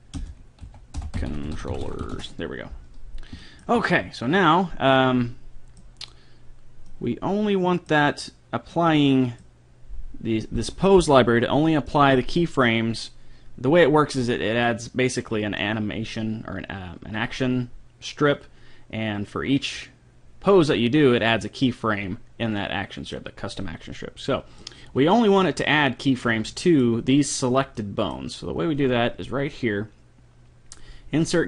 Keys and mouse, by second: 1.8 l, 3.4-5.2 middle drag, 10.4 middle click, 11.8-14.4 middle drag, 23.2 middle click, 26.5-28.2 middle drag, 28.2-29.6 drag.